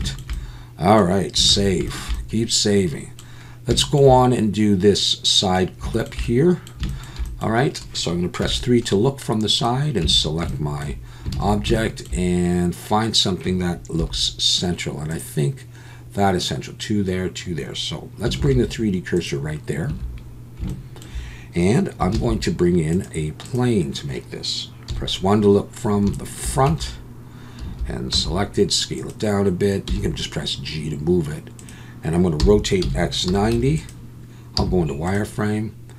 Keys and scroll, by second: 1.5 ctrl+s, 8.4 KP_3, 10.0 Tab, 11.3 alt+a, 14.0 3, 18.4 shift+s, 19.9 Tab, 22.1 shift+a, 24.9 KP_1, 26.7 Tab, 27.6 a, 28.1 s, 29.9 g, 32.4 r, 32.8 x, 33.3 9, 33.5 0, 34.6 z.